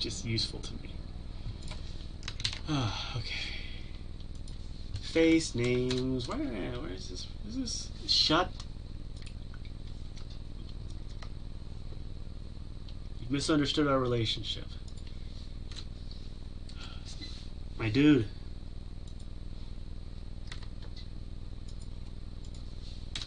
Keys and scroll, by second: 2.5 ctrl+alt+l, 11.1 Tab.